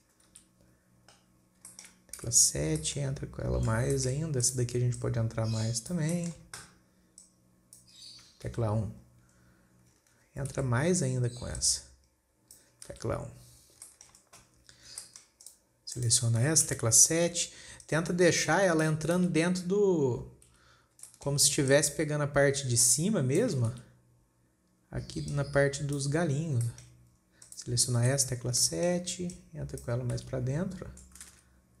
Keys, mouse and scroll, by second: 0.7 KP_1, 1.9 scroll up 3, 2.1-2.6 shift+middle drag, 2.6 KP_7, 3.3-4.1 shift+middle drag, 4.1 scroll down 3, 4.5-4.9 shift+middle drag, 4.9 click, 5.4 click, 6.6-7.7 shift+middle drag, 7.7 click, 8.4-8.9 scroll down 4, 8.9 KP_1, 9.8-10.2 scroll up 3, 11.0 KP_7, 12.0 click, 13.4 KP_1, 14.0 scroll down 3, 14.3-15.3 shift+middle drag, 15.3 scroll up 2, 15.5-15.9 shift+middle drag, 15.9 click, 16.4 click, 17.2 KP_7, 18.3 click, 19.7 KP_1, 21.5-22.1 shift+middle drag, 22.1 click, 24.2 KP_1, 25.7 click, 26.6 scroll down 5, 27.2 shift+middle click, 27.6 scroll up 2, 27.9 click, 28.5 KP_7, 29.1-29.8 shift+middle drag, 29.8 click, 30.7 KP_1, 31.5-31.8 scroll down 5.